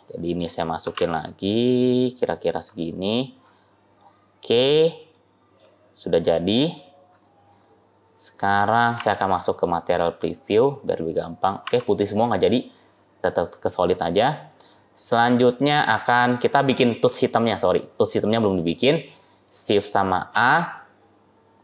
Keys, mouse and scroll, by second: 0.8 g, 3.0-3.8 scroll down 3, 3.3 click, 3.9 middle click, 4.6 scroll down 2, 4.7 scroll up 1, 5.0 middle click, 6.0 scroll down 1, 6.0 scroll up 4, 6.3-6.9 scroll down 7, 6.9 click, 7.5 scroll up 1, 8.8 z, 11.5 z, 12.8-13.7 scroll up 3, 13.7 click, 13.7-14.2 scroll up 3, 14.2-14.8 scroll down 3, 14.6 middle click, 14.6 scroll up 1, 15.3-15.6 scroll down 1, 15.6 middle click, 17.1-17.8 scroll down 3, 17.8 middle click, 18.9 click, 20.2 shift+a.